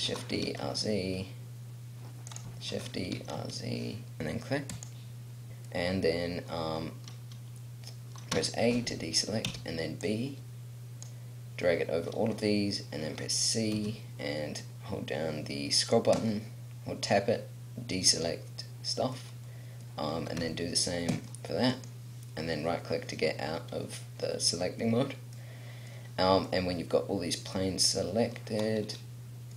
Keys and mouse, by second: 0.0 shift+d, 3.1 shift+d, 4.8 click, 5.7 middle click, 8.3 a, 9.5 b, 13.8 c, 20.4 c, 24.7 middle click.